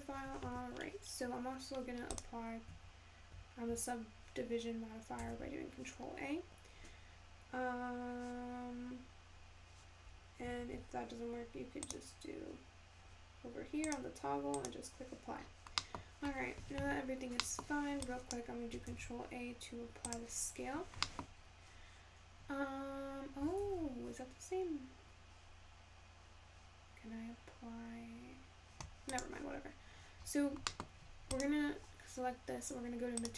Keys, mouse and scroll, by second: 3.0 click, 5.6 ctrl+a, 15.0 click, 19.8 ctrl+a.